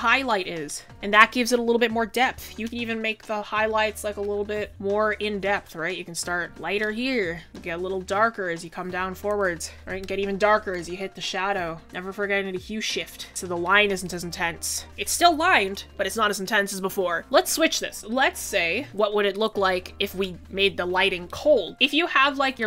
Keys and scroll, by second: 17.2 ctrl+z.